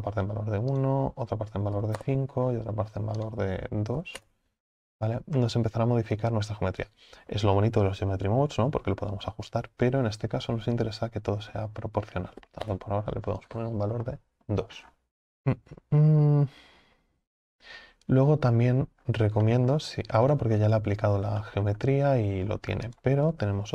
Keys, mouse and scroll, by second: 5.0 scroll down 5, 5.5-12.7 middle drag, 12.7-20.3 drag, 20.3 scroll up 5, 20.7-23.7 middle drag.